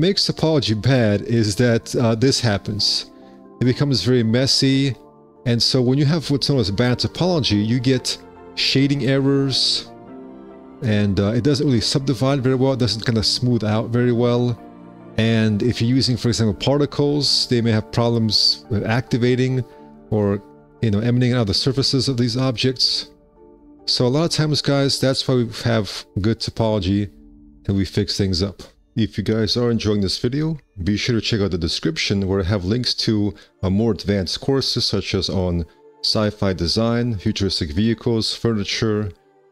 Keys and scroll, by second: 8.5 F4, 11.1 space, 11.6 1, 16.0 space, 20.3 space, 23.3 space, 28.5 1, 32.0 space, 32.1 1, 34.1 F4, 34.9 F4, 36.7 a.